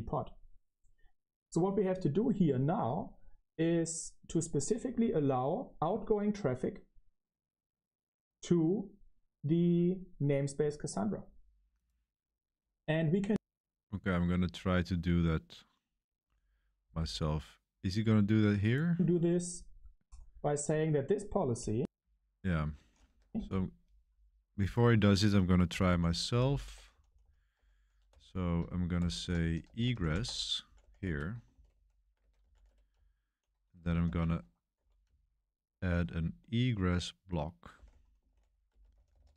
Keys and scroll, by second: 23.2 ctrl+k, 23.4 ctrl+k, 25.8-39.3 typing, 30.2 Escape.